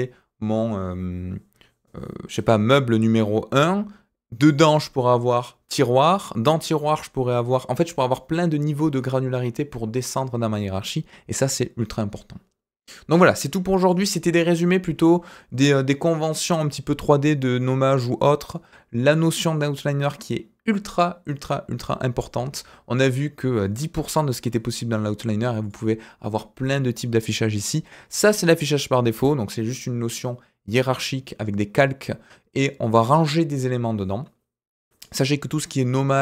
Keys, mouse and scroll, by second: 4.4 click, 12.8-13.8 middle drag, 25.6 click.